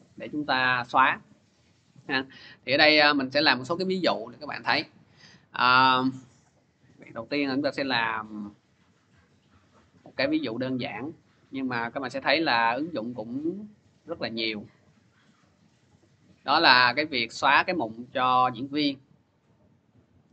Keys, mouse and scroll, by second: 2.9 click, 3.2 click, 5.2 click, 6.6-7.3 scroll, 7.3-7.9 scroll, 8.9-9.9 scroll, 9.9-11.8 scroll, 11.9 click, 12.1 click, 12.9 click, 13.1 click, 13.9 click, 14.1 click, 16.5 click, 20.1 click.